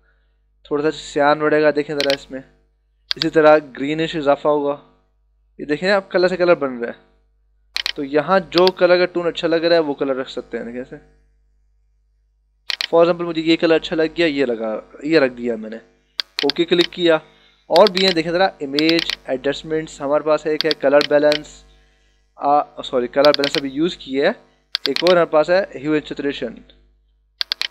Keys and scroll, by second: 26.7 d.